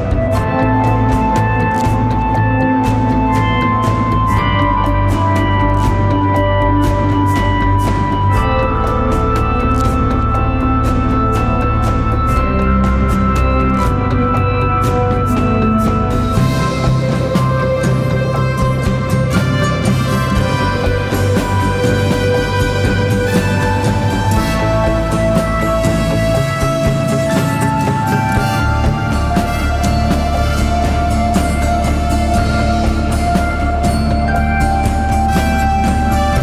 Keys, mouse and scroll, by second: 6.5 right click, 9.2 ctrl+d.